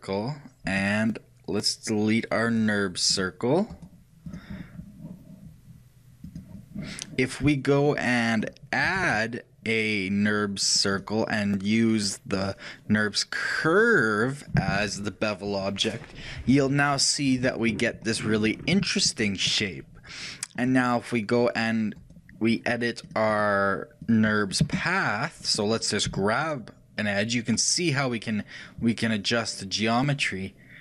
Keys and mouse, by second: 0.8-2.7 drag, 2.7-6.6 right drag, 6.6 ctrl+z, 8.0-11.1 middle drag, 9.1 shift+a, 12.4-14.3 drag, 17.4-21.2 middle drag, 23.1-25.2 drag, 23.1-25.0 right drag.